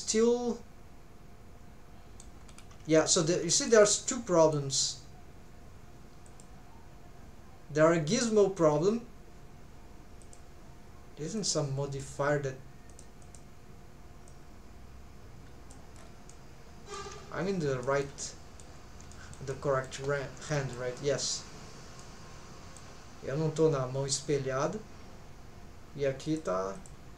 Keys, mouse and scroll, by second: 2.4 scroll up 3, 3.0 shift+middle click, 3.5 middle click, 3.8 middle click, 6.3 click, 10.2 click, 12.9 click, 13.2 click, 16.0 scroll down 2, 16.3 middle click, 17.2-17.8 scroll down 2, 17.8 shift+middle click, 18.2 middle click, 18.7 scroll down 1, 19.1 shift+middle click, 19.5 middle click, 20.2-20.5 scroll up 2, 20.5 shift+middle click, 21.0 middle click, 21.5-21.9 scroll up 2, 22.0 middle click, 26.3 click, 26.7 click.